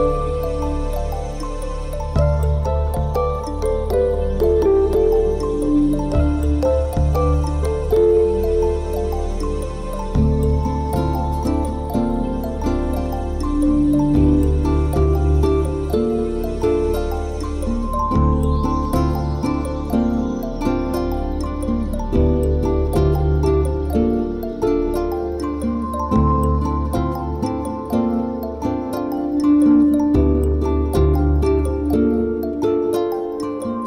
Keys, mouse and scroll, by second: 1.0 Delete, 2.4 b, 5.5 KP_1, 6.2 middle click, 6.8 KP_7, 7.5 a, 7.7 b, 8.8 Delete, 9.4 middle click, 11.2 Tab, 12.2 click, 12.8 n, 13.8 click, 14.0 n, 16.4 click, 17.3 click, 21.8 middle click, 23.7 click, 24.2 middle click, 26.2 Tab, 26.4 middle click, 28.3 shift+middle click, 28.5-28.9 scroll down 1, 33.2 click.